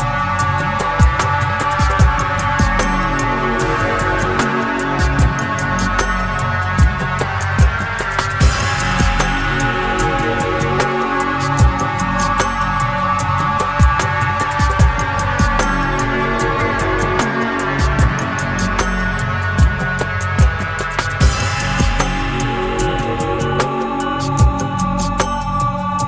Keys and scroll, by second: 0.1 ctrl+r, 0.4 Escape, 2.8 ctrl+e, 4.3 ctrl+e, 5.8 ctrl+e, 12.4 ctrl+f, 17.7 ctrl+r, 18.4 Escape, 21.1 ctrl++, 23.3 ctrl++.